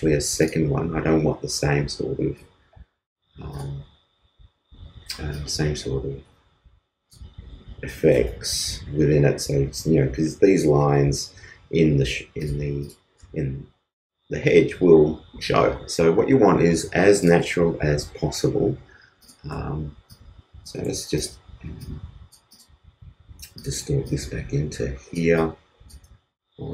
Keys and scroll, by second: 8.6 super+c, 17.9 super+v, 21.2 super+t.